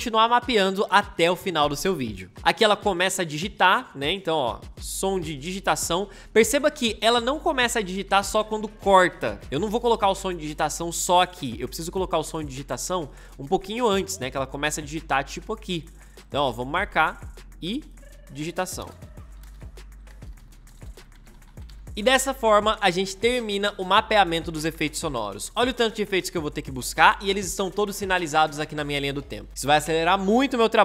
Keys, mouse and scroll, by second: 16.6 m, 18.7 Return, 18.9-22.0 typing, 20.1 Return.